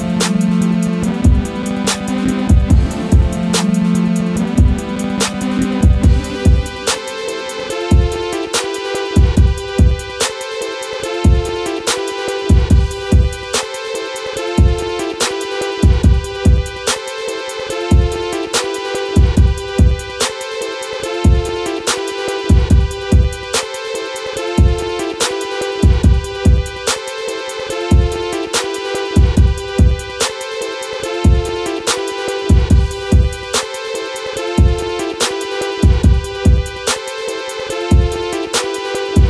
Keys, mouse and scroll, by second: 1.9 click, 3.9 right click, 4.3 click, 4.6 scroll up 1, 5.0 click, 10.0 click, 12.5-16.2 drag, 16.9 right click, 18.2 click, 19.9 right click, 20.5 click, 20.9 scroll down 1, 21.2 click, 22.2 scroll up 1, 22.8 shift+click, 22.9 shift+click, 23.9 scroll up 1, 25.8-26.6 scroll up 1, 26.6 click, 27.5-28.8 drag, 28.8-29.6 scroll down 1, 29.6 click, 30.1 scroll down 1, 33.1 right click, 34.3 click.